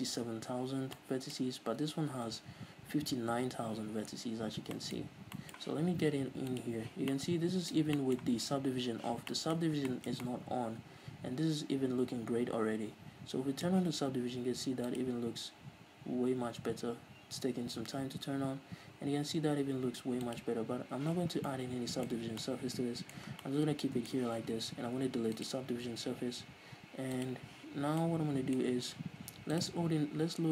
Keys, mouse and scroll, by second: 0.8 Tab, 1.9 scroll up 1, 2.1 a, 4.8 scroll down 1, 5.1 Tab, 5.4-5.7 scroll up 1, 6.9 click, 7.5-18.1 middle drag, 10.0 scroll up 1, 18.1-21.7 drag, 21.7 scroll down 2, 21.8-25.8 middle drag, 22.5-22.8 scroll up 2, 23.7 scroll down 2, 25.8-27.3 drag, 27.6 click, 28.1 scroll down 2, 28.4-30.0 middle drag, 29.0-30.0 scroll up 2, 30.0-30.5 drag.